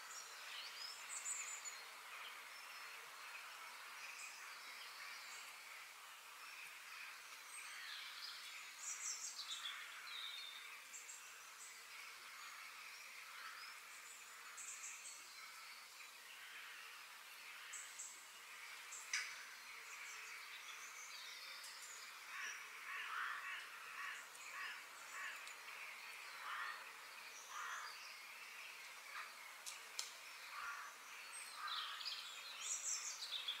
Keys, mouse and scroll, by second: 1.1 KP_Decimal, 2.1 KP_3, 2.8 g, 4.5-5.2 scroll down 7, 5.2 middle click, 5.7-6.0 scroll down 3, 6.0 click, 6.7 middle click, 7.6 click, 8.1 f, 9.9 scroll down 3, 10.2 middle click, 10.8-11.1 scroll up 2, 11.1-13.3 shift+middle drag, 16.1-17.9 middle drag, 18.1-20.1 middle drag, 20.8 middle click, 21.5-21.9 scroll down 4, 21.9 shift+middle click, 22.7-23.4 scroll down 1, 23.4-25.3 middle drag, 27.9-29.6 middle drag, 30.2-30.9 scroll up 2, 30.9-32.4 shift+middle drag, 32.4 click, 32.9 shift+click, 33.3-33.6 scroll down 2.